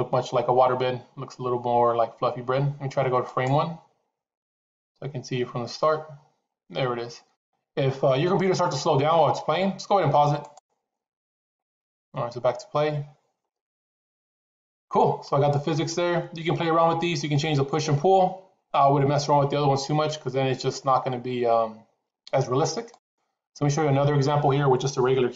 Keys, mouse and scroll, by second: 3.6 click, 10.6 click, 11.4 click, 23.3 click.